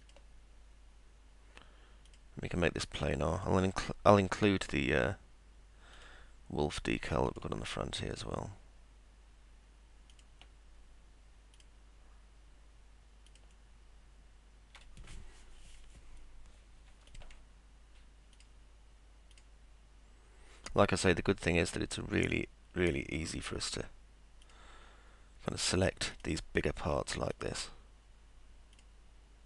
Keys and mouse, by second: 0.0 click, 2.1 click, 3.4 click, 6.0 click, 7.3 ctrl+click, 10.1 ctrl+click, 11.6 ctrl+click, 13.3 ctrl+click, 17.1 ctrl+click, 18.4 ctrl+click, 19.3 ctrl+click, 22.2 ctrl+click, 24.4 ctrl+click, 26.1 ctrl+click, 27.3 ctrl+click, 28.7 ctrl+click.